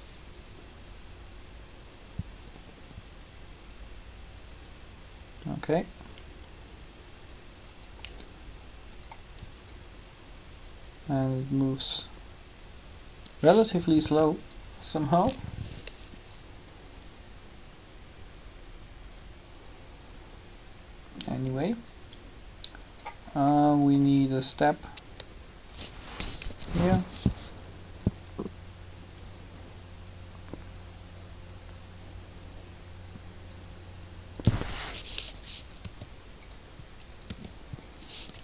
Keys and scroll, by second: 26.4 3, 35.8 r.